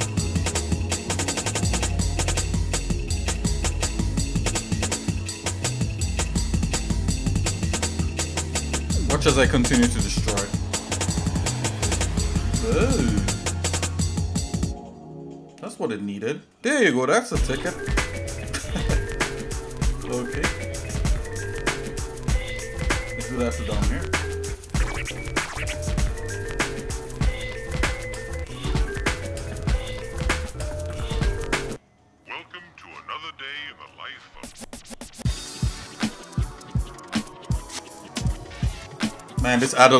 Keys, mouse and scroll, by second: 7.1 click, 7.4 shift+middle click, 7.9 Tab, 8.7 shift+middle click, 11.2 click, 14.0 click, 18.7-19.1 scroll down 3, 19.3 middle click, 19.8 middle click, 20.2 middle click, 20.6 middle click, 21.0 middle click, 21.5 middle click, 22.2 scroll up 1, 22.7 scroll up 1, 24.8 click, 25.4 middle click, 26.3-26.9 scroll up 3, 27.0 click, 27.3 Tab, 28.6 shift+middle click, 29.9 click, 30.5 alt+shift+click, 31.7 shift+middle click, 32.8 shift+middle click, 33.5 shift+middle click, 34.5 shift+click, 35.6 shift+click, 36.0 shift+middle click, 37.9 ctrl+click, 39.3 ctrl+click.